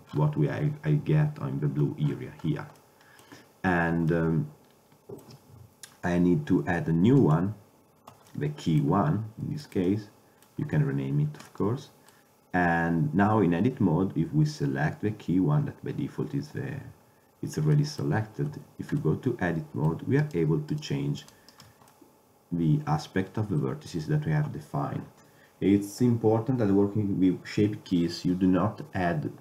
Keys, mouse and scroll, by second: 7.3-8.4 drag, 8.4-9.3 middle drag, 17.9-18.6 middle drag, 18.6 Tab, 20.3-21.9 middle drag.